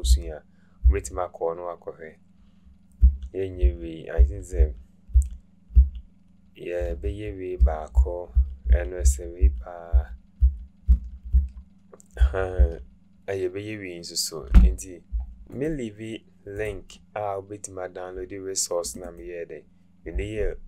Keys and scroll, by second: 0.8 Right, 3.0 Right, 3.6 Right, 4.2 Right, 4.6 Right, 5.1 Right, 5.7 Right, 7.0 Right, 7.6 Right, 8.0 Right, 8.4 Right, 8.7 Right, 9.0-11.3 Right, 12.2 Right, 12.6 Right.